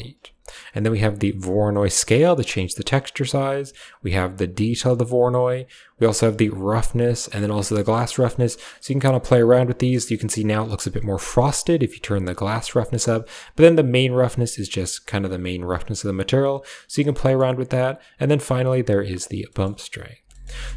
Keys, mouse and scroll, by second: 0.8-2.4 drag, 3.4-4.7 drag, 5.3-6.9 drag, 7.3-12.6 drag, 13.1-16.3 drag, 17.1 middle click, 17.8-18.9 drag, 19.4 middle click, 19.9 click, 20.0 typing, 20.2 middle click.